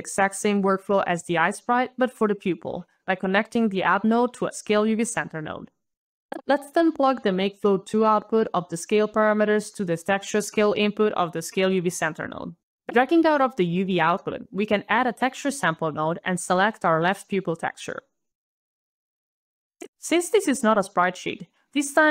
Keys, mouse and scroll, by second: 0.9 alt+click, 3.7 alt+s, 3.9 alt+c, 4.0 alt+a, 4.2 alt+l, 4.4 alt+e, 5.0 alt+Return, 7.1 alt+click, 7.4 alt+click, 12.5 alt+right click, 13.1 alt+click, 13.7 alt+t, 14.0 alt+e, 14.2 alt+x, 14.5 alt+t, 14.6 alt+u, 14.7 alt+r, 14.9 alt+e, 15.3 alt+Return, 16.3 alt+click, 17.8 alt+scroll down 1, 17.9 alt+scroll, 18.2 alt+click, 18.9 alt+click, 19.0-19.3 alt+scroll, 19.1 alt+click, 19.3 alt+p, 19.3 alt+u, 19.5 alt+i, 19.5 alt+l, 19.5 alt+click, 21.6-22.1 alt+scroll down 2.